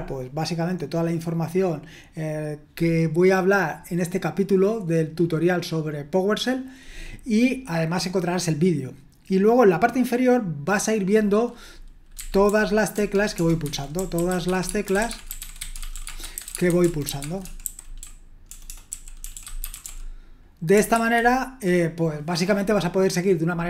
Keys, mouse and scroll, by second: 12.2-19.8 typing.